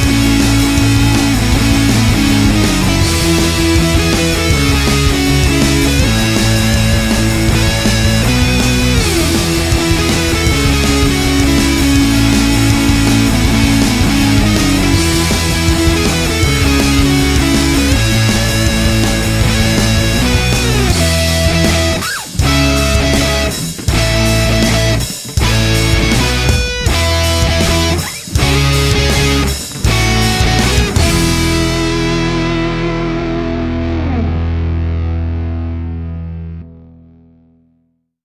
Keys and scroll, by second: 6.9-8.0 typing.